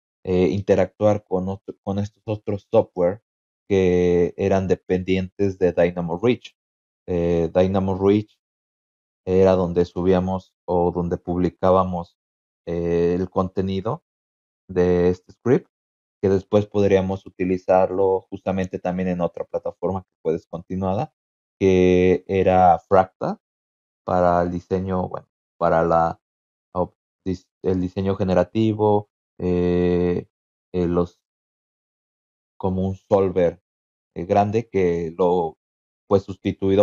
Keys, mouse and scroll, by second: 6.9 click, 8.6 click, 10.8 click, 11.0 click.